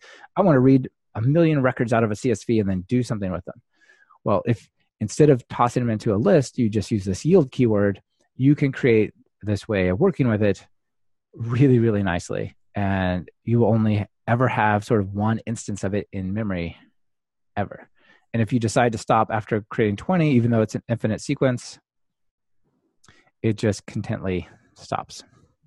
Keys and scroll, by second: 22.8 alt+super+r.